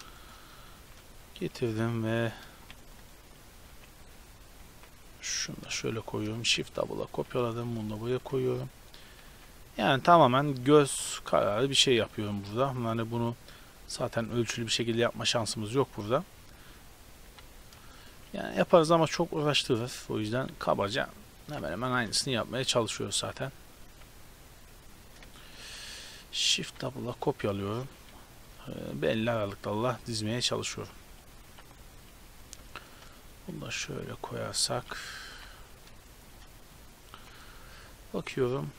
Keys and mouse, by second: 0.9 shift+d, 1.2 r, 3.2 r, 3.8 g, 4.2 r, 4.6 g, 6.2 shift+d, 6.6 r, 7.2 g, 8.1 shift+d, 9.3 g, 10.4 click, 10.7 g, 11.6 g, 13.2 right click, 13.6 r, 15.4 g, 16.4 r, 17.2 g, 18.4-20.7 typing, 21.9 shift+d, 23.0 r, 23.9 g, 25.6 shift+d, 26.1 r, 26.6 g, 28.0-37.2 typing.